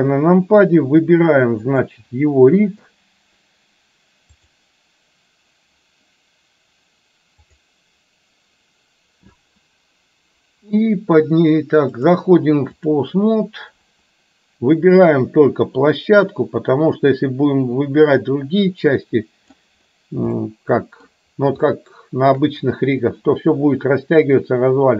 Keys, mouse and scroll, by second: 1.8 click, 4.6 click, 7.6 click, 11.9-13.1 drag, 16.4-19.7 drag, 20.4-21.1 middle drag, 21.1 scroll down 1, 21.7-22.4 shift+middle drag.